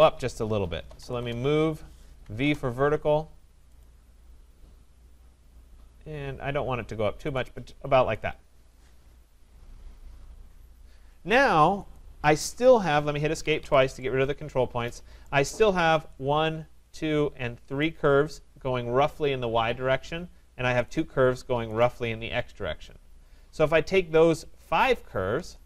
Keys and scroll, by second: 1.2 Return, 13.4 Escape.